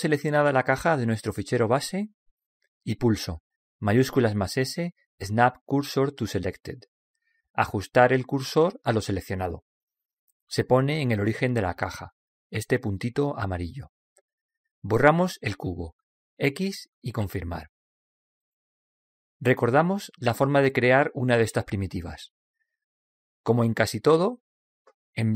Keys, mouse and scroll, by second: 4.2 shift+s, 16.7 x.